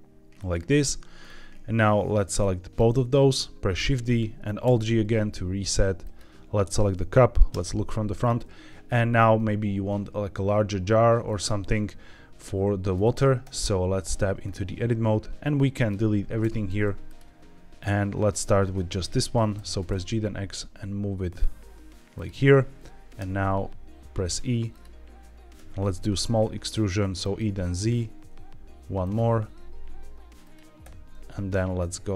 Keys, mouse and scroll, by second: 0.3 click, 1.1 scroll up 1, 2.2-2.7 drag, 3.7 shift+d, 4.0 right click, 4.6 alt+g, 5.9 click, 7.4 KP_1, 8.1-8.8 scroll up 2, 8.9 shift+middle drag, 11.3-11.9 scroll down 1, 12.9 shift+middle click, 13.3 Tab, 14.3-15.3 scroll up 2, 15.3 click, 16.3 x, 17.7 click, 19.5 g, 19.8 x, 22.1 click, 23.1 e, 24.6 click, 25.5 e, 25.8 e, 25.8 z, 27.1 click, 27.8 e, 27.9 z, 28.9 click, 29.2 e, 29.3 z, 30.3 click, 30.7 e.